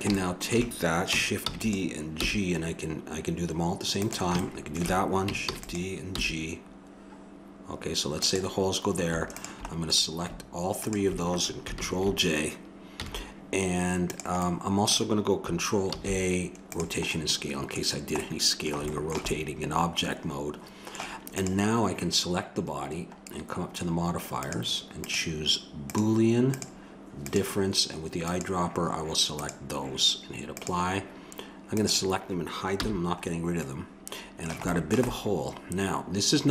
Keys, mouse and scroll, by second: 0.1 middle click, 1.5 shift+d, 2.1 g, 5.4 shift+d, 6.1 g, 9.4-12.3 drag, 11.7 ctrl+j, 12.9 z, 14.4-16.0 middle drag, 16.0 ctrl+a, 21.4-23.1 drag, 23.1-24.4 middle drag, 24.4-30.2 drag, 30.2 middle click, 30.6-33.1 drag, 32.7 h, 33.3 click, 33.6-35.3 middle drag.